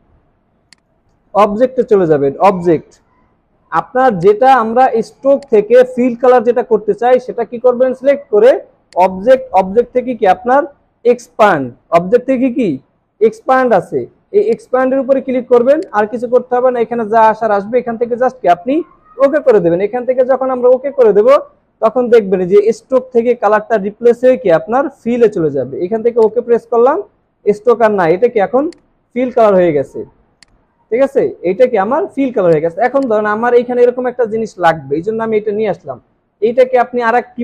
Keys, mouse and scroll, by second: 29.5 alt+scroll up 1, 31.8 alt+scroll down 1, 32.4-32.8 alt+scroll down 1.